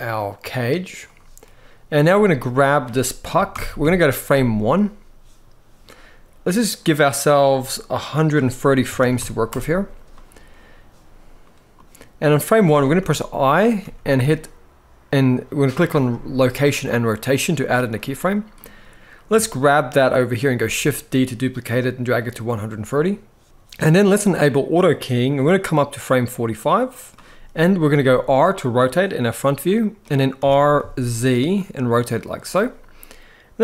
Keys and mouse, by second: 3.2 shift+Left, 3.5 KP_1, 7.9-9.2 drag, 13.5 i, 17.7 middle click, 18.2-19.0 drag, 20.3 shift+d, 25.7-26.8 drag, 27.6 r, 29.7 click, 30.1 r, 30.5 z, 32.1 click.